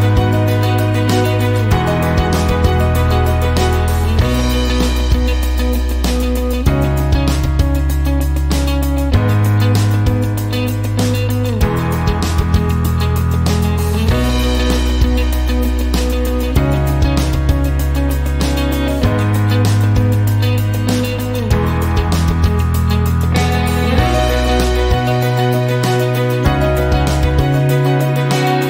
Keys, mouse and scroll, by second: 1.5 click, 3.6 click, 5.7 click, 9.1-11.2 typing, 14.5 click, 15.3 click, 16.0-18.3 typing, 19.4 click, 19.8 click, 20.5-23.1 typing, 27.1 click.